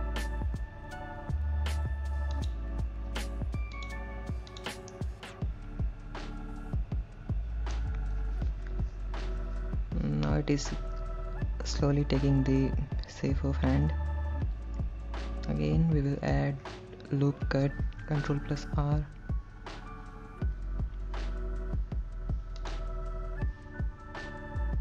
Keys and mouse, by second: 2.6 click, 4.0 click, 5.2-8.0 middle drag, 12.1-16.6 middle drag, 18.6 ctrl+r.